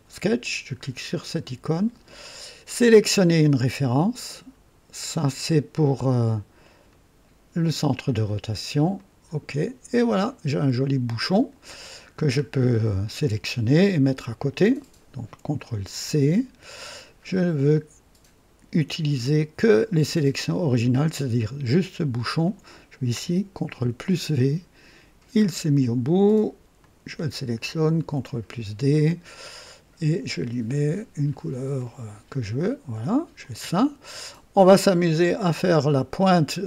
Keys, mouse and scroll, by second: 1.0 click, 2.6 click, 6.8 click, 8.9 click, 10.0-11.5 drag, 12.0-12.3 scroll down 1, 14.6 click, 15.7 ctrl+c, 15.9 ctrl+c, 20.7 click, 22.3 click, 23.8 ctrl+v, 24.3 ctrl+right click, 25.4-25.7 scroll up 1, 26.7 click, 27.9 ctrl+d, 29.5 click, 30.8 click, 31.7 click, 32.9 click, 33.3 click, 34.9 click, 35.6 right click, 36.5-36.6 scroll down 1.